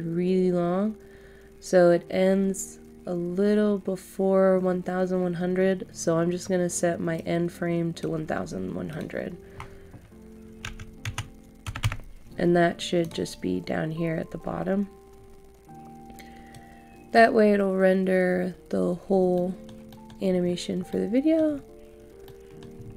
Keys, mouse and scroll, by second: 7.1-8.7 drag, 10.6-11.7 typing, 13.0-17.7 drag, 19.1 scroll down 1, 19.3 middle click, 20.2 scroll down 1, 20.5-20.9 scroll up 1, 20.9 middle click, 21.4 scroll up 1, 22.2 middle click, 22.8 scroll up 1.